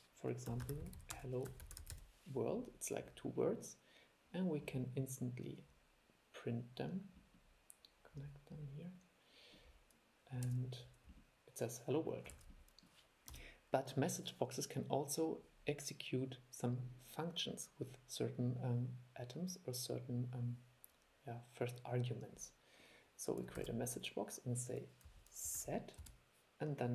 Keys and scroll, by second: 10.6 super+e, 12.6 super+e, 23.7 super+2.